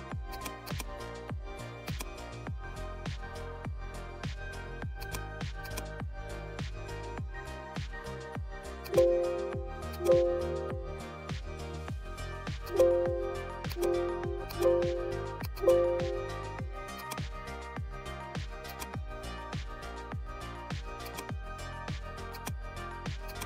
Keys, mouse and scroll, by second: 12.5 click, 16.9 click, 18.6 click, 21.0 click, 21.0-23.4 drag.